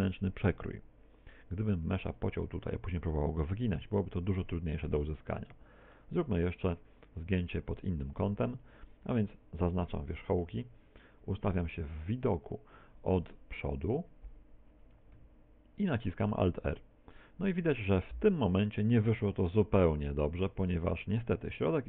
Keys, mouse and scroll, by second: 2.1 ctrl+r, 5.9 middle click, 6.3 z, 7.1 KP_1, 12.1 KP_1, 12.1 KP_7, 15.9 alt+r.